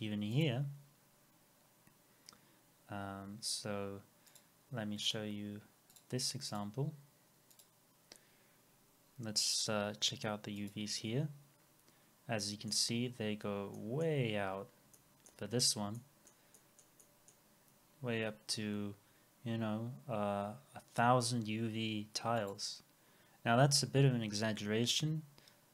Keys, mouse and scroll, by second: 8.1-8.4 scroll down 1, 12.4 middle click, 13.1 scroll down 1, 13.7 middle click, 14.2-14.6 scroll down 1, 14.9 middle click, 15.5 scroll down 1, 16.0 middle click, 17.7 scroll up 1, 23.4 scroll down 1.